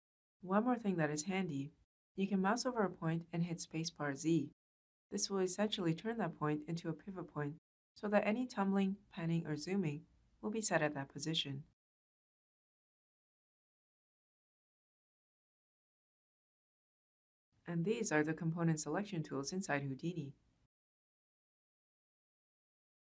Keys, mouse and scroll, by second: 8.9 z, 8.9 space, 12.6 space, 12.6 z, 16.4 space, 16.5 z.